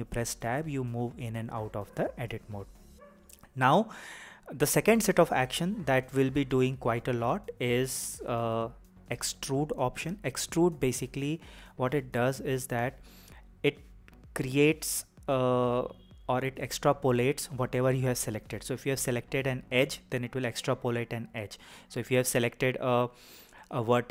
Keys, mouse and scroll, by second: 0.6 Tab, 1.3 Tab, 2.7 Tab, 7.6 click, 8.5 click, 9.6 click, 10.7 click, 12.4 click, 14.1 click, 15.2 click, 16.5 click, 17.8 click, 18.6 click, 20.2 click, 21.3 click.